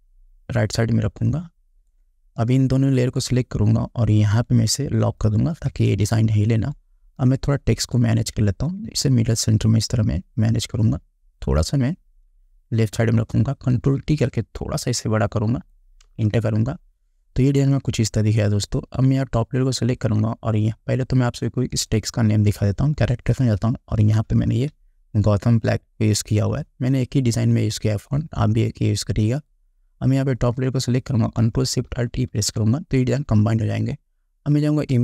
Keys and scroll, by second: 6.1 space, 13.8 ctrl+t, 16.2 Return, 32.4 ctrl+alt+shift+e.